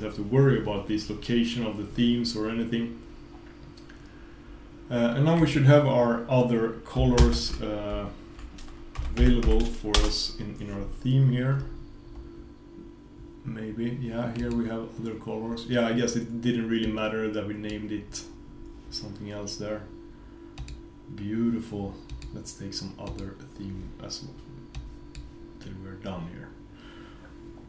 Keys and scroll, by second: 7.2 super+space.